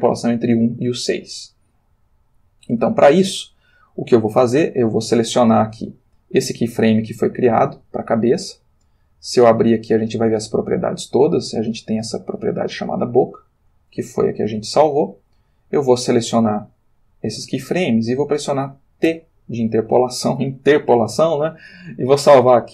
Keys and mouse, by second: 6.9 click, 8.7 click, 9.8-11.3 middle drag, 13.8-14.4 drag, 15.1 shift+click, 15.9 shift+click, 19.1 t.